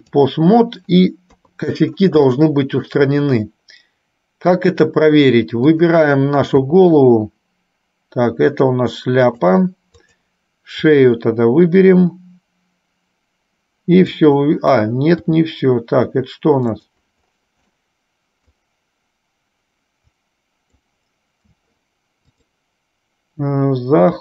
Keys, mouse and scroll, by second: 1.4 KP_3, 2.5 shift+middle click, 5.7 click, 6.9 r, 10.1 click, 11.1 r, 15.5 r, 18.0 middle click, 20.2 click, 22.5-24.2 drag.